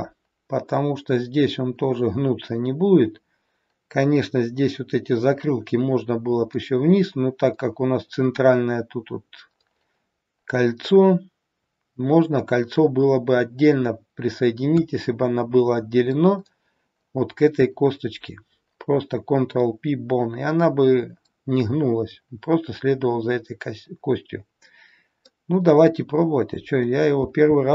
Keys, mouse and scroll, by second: 27.3 e.